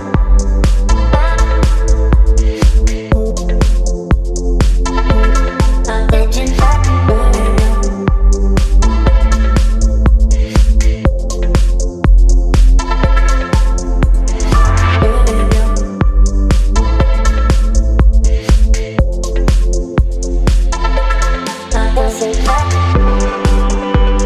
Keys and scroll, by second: 5.6 space, 15.8 space, 18.5 space, 22.2 space.